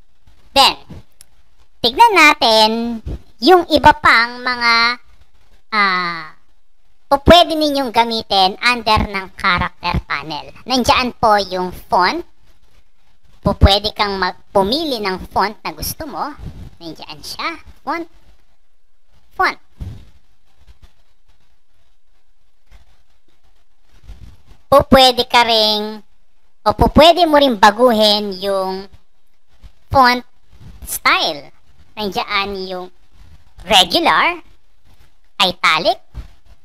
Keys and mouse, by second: 0.6 click, 12.5 click, 14.8 click, 16.6 click, 17.7 click, 18.6 click, 20.2 click, 21.5 click, 22.4 click, 24.2 click, 25.7 click, 34.1 click, 35.3 click, 36.4 click.